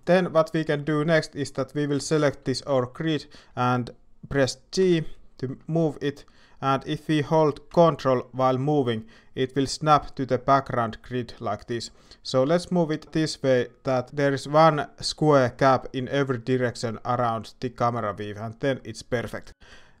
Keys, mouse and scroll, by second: 0.0 click, 4.8 g.